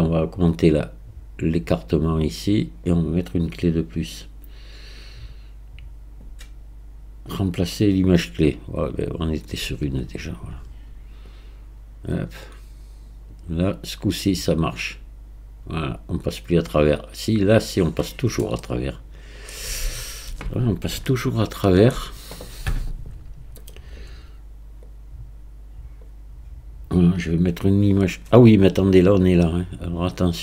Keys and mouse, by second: 0.5-3.0 drag, 3.8-9.0 drag, 11.4-13.2 drag, 13.6-16.4 drag, 16.4 right click, 18.7-19.5 middle drag, 21.1-22.0 shift+middle drag, 24.9-26.0 drag, 29.2-30.4 drag.